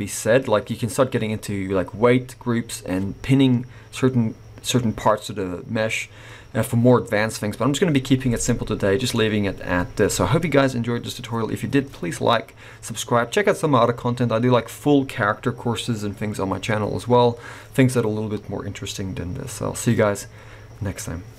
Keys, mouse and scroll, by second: 1.6-3.4 scroll up 3, 8.5 middle click.